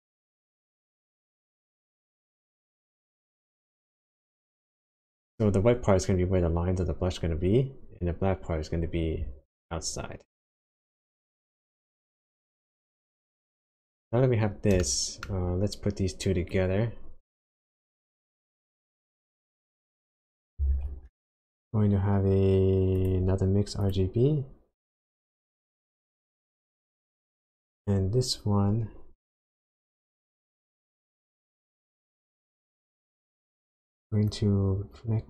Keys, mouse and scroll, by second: 12.2 click, 12.5-13.9 scroll down 8, 14.8 shift+middle click, 15.4 shift+scroll up 1, 16.5 click, 17.9 click, 20.6 shift+a, 32.9 click, 34.3 click.